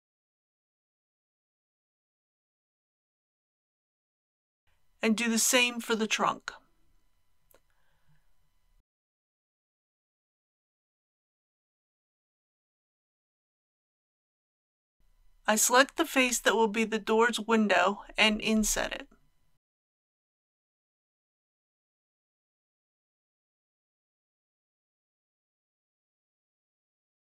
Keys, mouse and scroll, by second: 4.8 middle click, 6.4 click, 7.2 g, 7.5 z, 10.4 click, 15.0 3, 15.7 click, 16.8 KP_1, 17.9 KP_3, 21.5 i, 22.9 KP_Decimal, 23.1 KP_2.